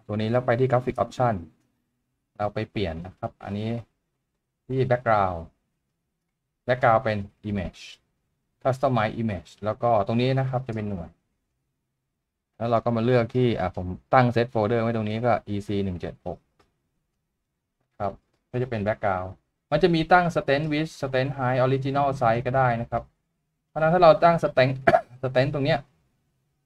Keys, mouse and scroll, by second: 11.6 double click, 17.2 double click, 21.3 double click.